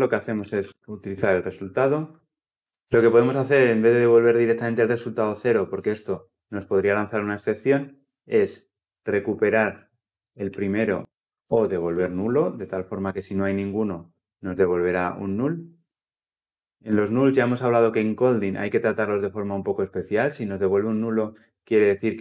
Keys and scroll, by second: 1.4 Return, 2.5 ctrl+z.